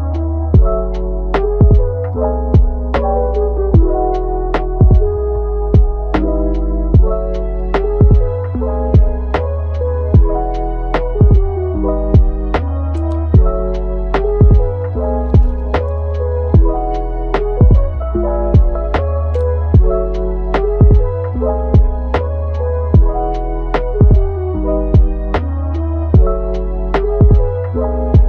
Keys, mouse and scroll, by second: 0.5 scroll down 3, 0.8 click, 1.6 middle click, 2.3 scroll up 2, 2.6 middle click, 3.1 Tab, 4.8 alt+s, 5.9 Tab, 6.2-7.4 middle drag, 7.4-7.8 scroll up 2, 7.8-9.6 middle drag, 9.6 Tab, 11.2 r, 13.0 Tab, 13.3-14.6 middle drag, 14.6-15.1 scroll down 1, 15.1-15.7 scroll up 2, 15.7-16.1 scroll down 2, 16.1-17.5 shift+middle drag, 17.5 Tab, 17.9 Tab, 19.1 scroll down 1, 19.4 click, 19.8 scroll up 1, 20.0-21.2 middle drag, 21.2-21.6 scroll down 2, 21.6 scroll up 1, 21.7-23.7 middle drag, 23.7 click, 24.3-25.8 middle drag, 25.8 KP_3, 26.2-26.7 scroll up 1, 26.7-27.4 shift+middle drag, 27.4-27.9 scroll up 2, 27.9 shift+d.